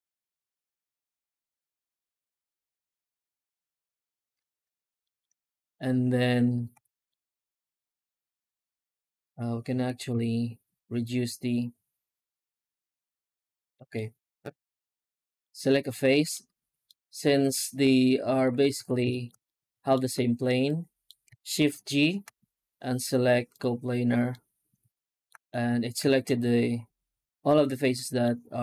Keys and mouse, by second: 4.9 shift+middle click, 5.5 right click, 5.8 Tab, 6.6 3, 6.9 middle click, 7.4 middle click, 9.6 a, 10.0 x, 13.8 middle click, 14.2 alt+middle click, 14.7 right click, 15.3 middle click, 15.7 middle click, 15.9 middle click, 16.7-18.2 middle drag, 18.2 middle click, 18.6 ctrl+s, 19.0 shift+middle click, 19.3 middle click, 19.6 alt+middle click, 20.5 middle click, 20.9 middle click, 21.6 shift+g, 24.2 middle click, 24.4 middle click, 24.6 middle click, 25.4 alt+middle click, 26.0 shift+middle click, 27.7 middle click, 28.1 middle click.